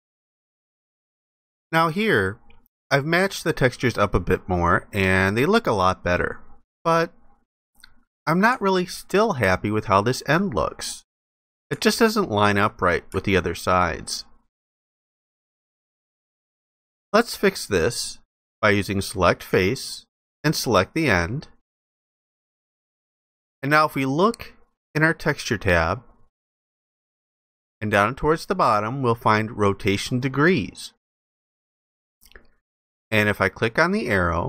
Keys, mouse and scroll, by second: 9.1 alt+click, 11.6 alt+click, 13.3 ctrl+alt+click, 15.8 alt+click.